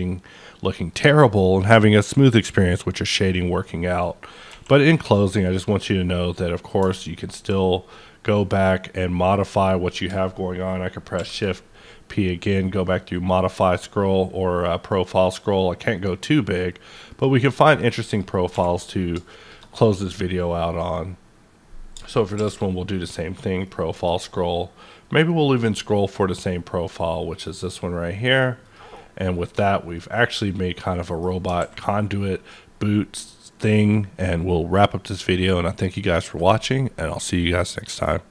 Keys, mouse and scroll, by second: 3.6-5.1 middle drag, 4.5 q, 5.1 click, 7.2-7.6 ctrl+scroll up 1, 11.2 shift+p, 12.2-13.0 scroll up 2, 13.3 scroll up 1, 13.9 scroll up 1, 15.2 scroll up 1, 17.1 click, 17.5 middle click, 18.0 click, 18.5 q, 19.4 click, 19.9-20.4 scroll up 1, 20.4 scroll down 1, 22.3 shift+p, 23.3-23.6 scroll up 1, 23.6 middle click, 24.2-26.0 scroll up 5, 26.0 scroll down 1, 28.6 click, 28.6 scroll down 1, 28.9-34.3 middle drag, 31.6 alt+a.